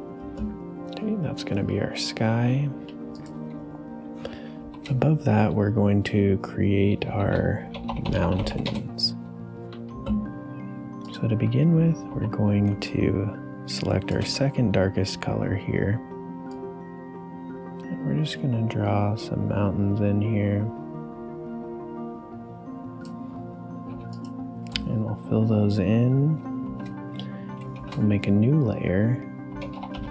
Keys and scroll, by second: 4.6 shift+n, 6.9-9.0 typing, 12.1 b, 12.7 space, 23.9 g, 26.6 shift+n, 27.7 shift+p, 29.2-30.1 typing.